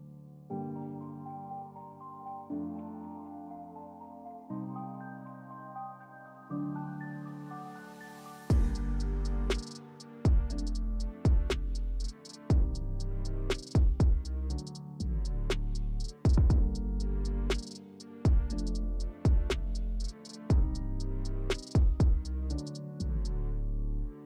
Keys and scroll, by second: 1.7 s, 4.5 s, 6.4 s, 9.6 s, 10.4 s, 12.4 s, 15.5-16.8 typing, 23.0 2.